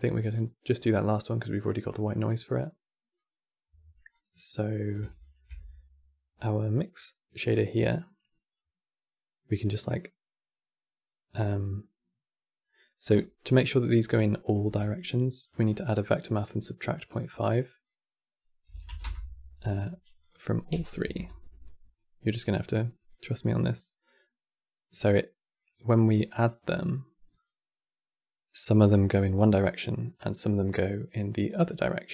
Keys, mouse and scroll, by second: 1.3 click, 3.8 click, 4.9 ctrl+shift+click, 7.7 click, 9.2-12.2 drag, 12.4 middle click, 12.9 click, 14.3 q, 16.0-23.1 drag, 23.1-23.7 middle drag, 23.7 click, 26.1-29.2 drag.